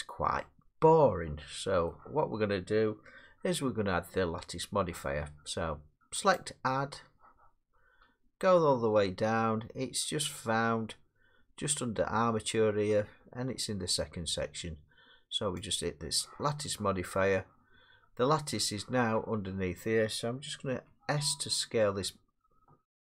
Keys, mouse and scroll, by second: 1.9-6.0 middle drag, 6.4-11.4 drag, 15.8-18.1 drag, 18.1 middle click, 20.7 s.